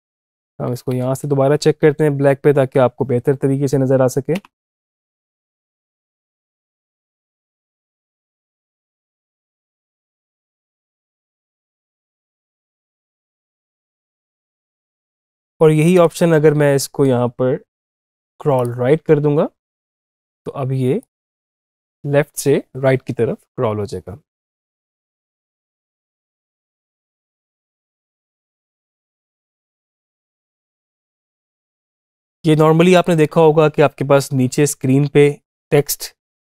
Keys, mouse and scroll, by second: 1.9 Up, 4.1 space, 14.3 space, 15.0 click, 21.6 space, 30.3 space, 30.6-32.8 drag.